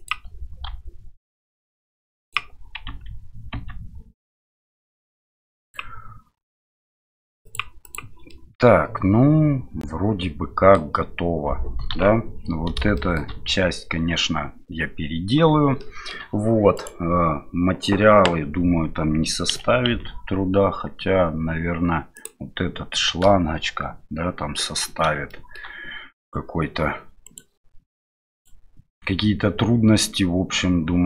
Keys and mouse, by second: 2.9 Tab, 5.6 click, 7.4 click, 7.8 click, 8.3-10.8 middle drag, 11.9 KP_1, 12.9 middle drag, 15.8-16.1 shift+middle drag, 16.7 right click, 19.5 r, 25.3-26.2 shift+middle drag, 26.2-27.3 right drag.